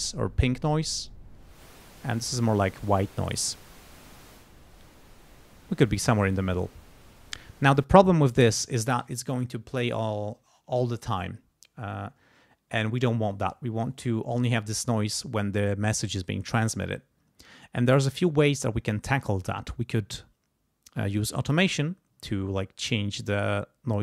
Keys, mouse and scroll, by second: 1.0 click, 4.3-6.0 drag, 7.8 click.